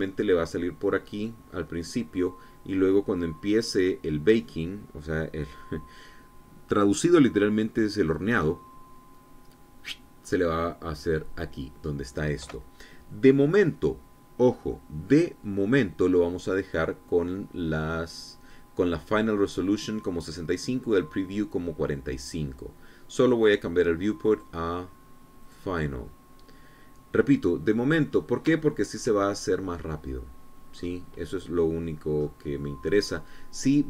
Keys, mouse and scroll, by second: 25.0 click, 26.1 click, 28.7-29.1 scroll up 1, 29.3 shift+middle click, 30.0 shift+scroll up 1, 30.4 scroll down 1, 31.4-31.8 scroll up 1, 32.1-32.9 scroll down 2, 32.9-33.2 scroll up 2, 33.2 scroll down 2, 33.7-33.8 scroll up 2.